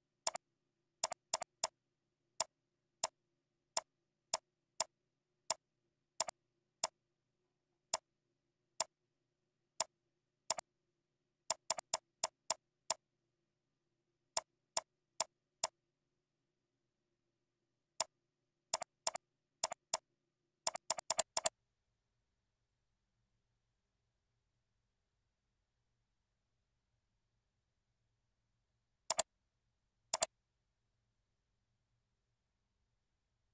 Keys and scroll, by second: 6.1 ctrl+z, 6.4 ctrl+a, 8.5 ctrl+z, 16.8 ctrl+Down, 17.2 ctrl+Right.